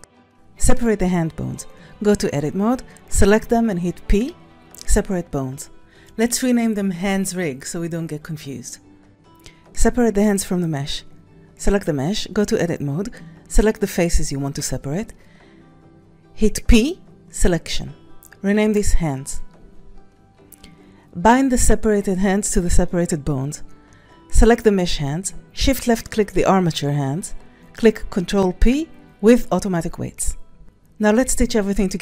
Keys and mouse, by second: 0.4 b, 1.8 KP_1, 2.9 c, 4.9 p, 5.5 Tab, 6.5-8.5 drag, 9.0 Right, 9.0 click, 9.5 click, 10.0 Tab, 10.5 alt+z, 11.1 c, 16.9 p, 17.6 Tab, 19.4-22.0 drag, 23.1 click, 25.5 s, 25.8 click, 30.9 click.